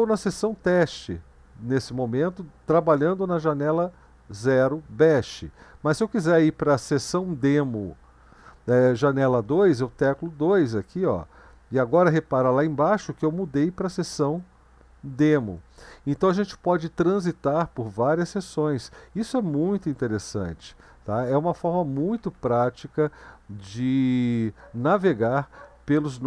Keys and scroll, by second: 1.9 Down, 10.8 2, 19.7 ctrl+b, 20.2 w, 21.5 Up, 21.7 Up, 22.0 Down, 22.2 Down, 22.4 Down, 22.5 Down, 23.5 Up, 23.7 Up, 24.4 Up.